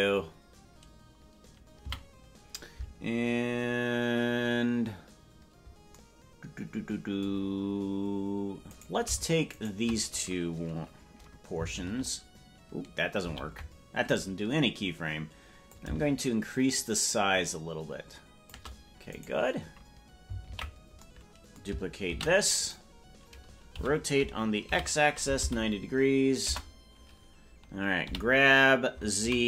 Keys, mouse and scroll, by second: 1.8 a, 8.6-10.9 right drag, 11.7 ctrl+k, 13.2 ctrl+l, 15.6-18.4 drag, 19.0-20.4 right drag, 20.4 ctrl+l, 22.0 shift+d, 23.7 r.